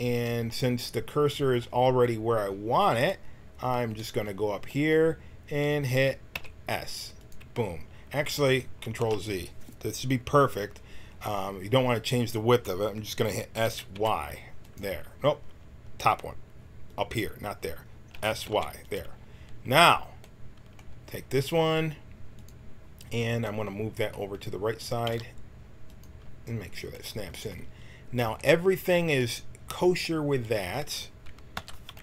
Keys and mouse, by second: 6.3 s, 9.0 ctrl+z, 13.5 s, 18.1 s, 22.3-25.0 drag, 25.0 g, 30.6 a, 31.5 l.